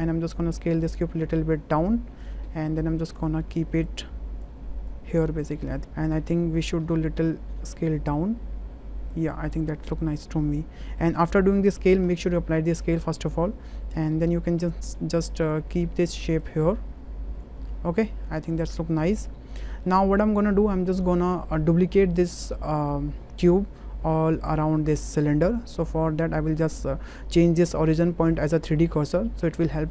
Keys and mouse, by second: 0.6-2.2 drag, 2.4 w, 2.8 click, 3.9 click, 4.9 click, 5.8 s, 5.8 z, 6.8 s, 9.1 click, 9.1 z, 10.2-11.1 drag, 12.2 ctrl+a, 13.1 drag, 13.8 shift+middle click, 14.1-14.5 middle drag, 16.5 click, 17.7-19.5 middle drag, 19.7 shift+middle click, 20.6 middle click, 22.1-23.4 drag.